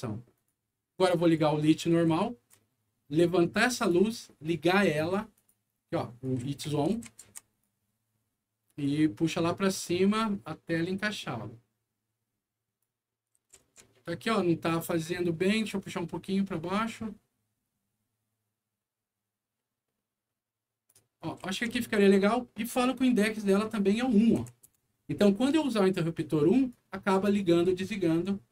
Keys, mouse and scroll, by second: 0.3 alt+click, 1.1 click, 1.8 right click, 2.0 q, 3.4 click, 5.3 click, 6.2-7.6 right drag, 6.4 w, 6.9 s, 7.2 e, 8.8-12.8 drag, 13.2 right click, 13.3 s, 13.7 d, 14.3 right click, 15.6-20.8 drag, 21.1 right click, 21.3-22.0 typing, 23.3 click, 24.3 KP_1, 24.6 Return, 25.4 right click, 26.7 right click.